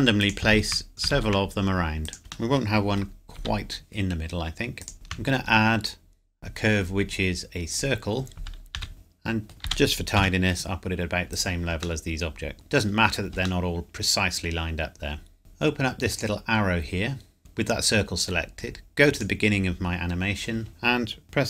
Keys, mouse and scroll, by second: 0.2 click, 0.5 shift+d, 0.9 click, 1.1 shift+d, 2.0 click, 2.5 middle click, 3.3 g, 4.8 click, 4.9 shift+a, 7.7 click, 8.7 s, 8.9 middle click, 9.6 g, 10.1 z, 11.3 click, 12.0 middle click, 16.1 click, 19.1 click.